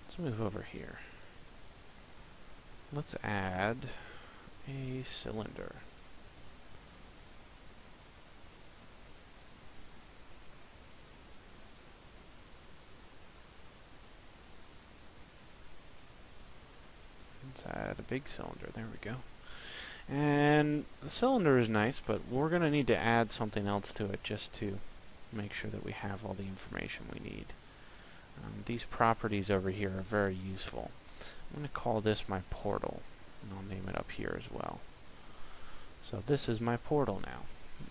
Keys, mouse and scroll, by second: 2.2 shift+a, 6.5 click, 8.2 click, 9.8 s, 11.6 click, 12.6 click, 17.0 click, 21.8 middle click.